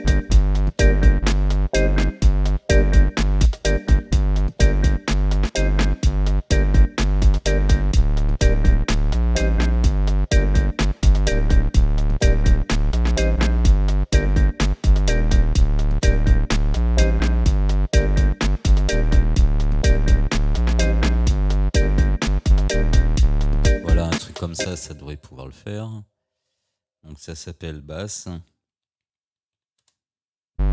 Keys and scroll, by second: 24.7 space, 28.0 ctrl+r, 28.9 b, 29.8 Return.